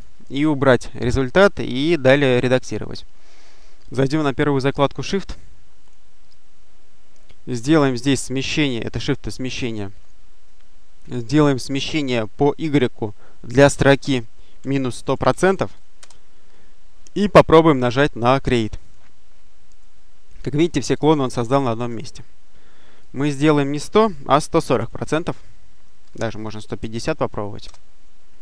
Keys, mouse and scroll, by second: 0.8-1.5 scroll up 1, 5.7 click, 8.6 click, 14.2-15.6 typing, 18.7 click, 22.9 click, 24.6 4, 25.9 BackSpace, 26.7 5, 27.5 Return.